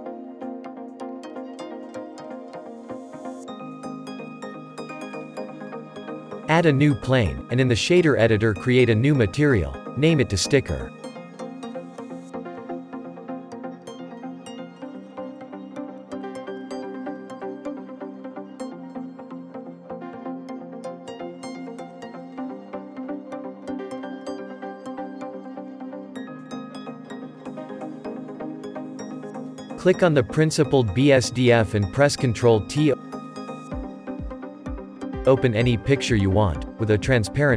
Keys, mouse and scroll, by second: 0.7 click, 2.4 click, 3.3-5.2 shift+middle drag, 5.2 click, 5.8 shift+a, 7.9-8.7 shift+middle drag, 8.7 click, 9.5 click, 10.5-11.5 middle drag, 11.5 r, 13.9-14.4 shift+middle drag, 14.4 scroll up 3, 14.9-16.5 middle drag, 16.5-17.7 drag, 17.7-18.7 shift+middle drag, 18.7-19.4 scroll up 10, 19.7-20.7 middle drag, 20.7 click, 21.8 click, 22.7 click, 23.6-27.6 drag, 30.6 click, 31.6 ctrl+t.